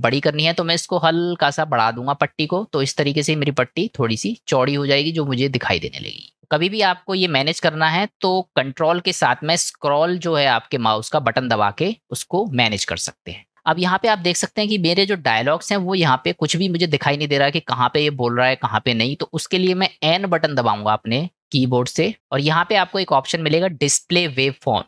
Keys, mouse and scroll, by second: 2.9-3.8 drag, 5.4-6.5 middle drag, 20.7 n.